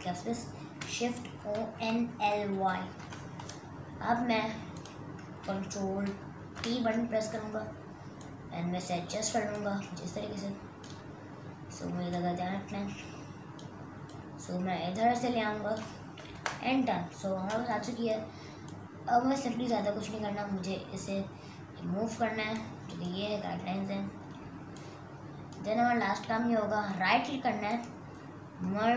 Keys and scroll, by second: 1.2-3.0 typing, 6.5 ctrl+t, 16.6 Return.